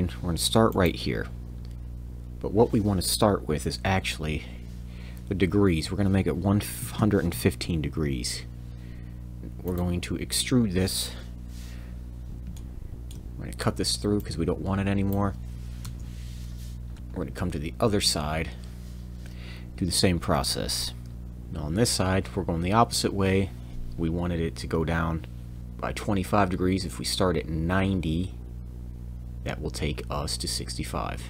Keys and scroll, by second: 3.8 Tab, 6.8 1, 7.3 5, 9.4 Escape, 9.4 Tab, 9.4 e, 15.8 Return, 21.1 l.